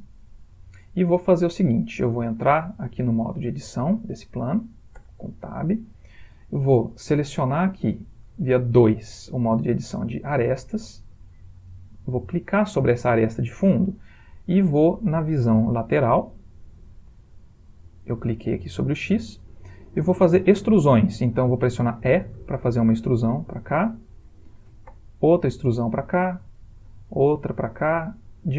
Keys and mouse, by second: 1.1 middle click, 5.1 Tab, 5.1 typing, 11.2 2, 12.4 click, 13.9 middle click, 15.7 click, 22.5 e, 25.0 e, 27.0 e.